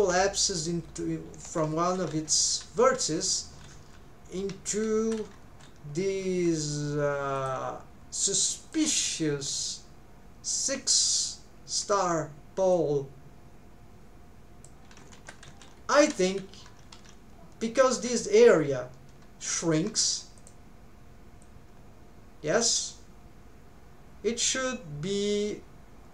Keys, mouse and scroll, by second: 1.5 middle click, 5.1-7.4 middle drag.